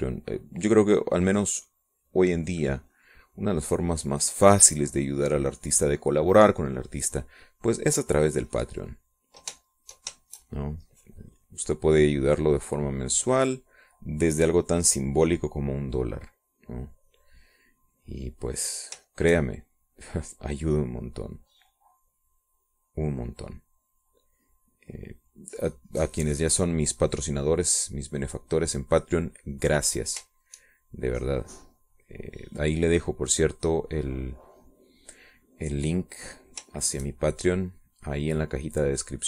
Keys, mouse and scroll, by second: 3.7-10.9 drag, 10.9 shift+click, 11.5-13.4 shift+drag, 13.5-14.9 drag, 15.6-17.4 drag, 17.8 middle click, 18.4 middle click, 19.3-27.4 drag, 27.7-31.7 drag, 31.7 shift+click, 32.1-35.8 shift+drag, 36.8-38.0 drag, 38.1-39.2 shift+drag.